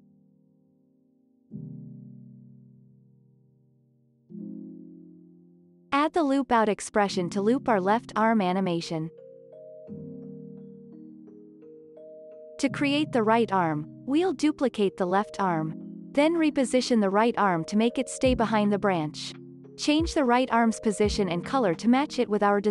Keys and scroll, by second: 1.6 space, 1.9 ctrl+s, 2.5 v, 5.1 Delete, 6.5-7.7 typing, 8.3 Return, 9.1 ctrl+s, 11.5 ctrl+s, 14.2 ctrl+d.